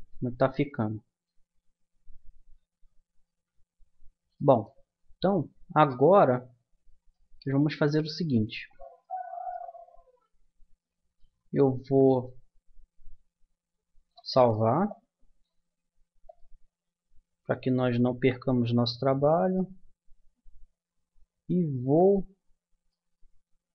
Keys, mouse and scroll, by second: 0.0 Escape, 0.5-3.2 middle drag, 3.4 a, 6.4-10.5 middle drag, 10.8-12.5 middle drag, 13.1-16.7 middle drag, 18.8-21.5 middle drag, 22.3-23.7 middle drag.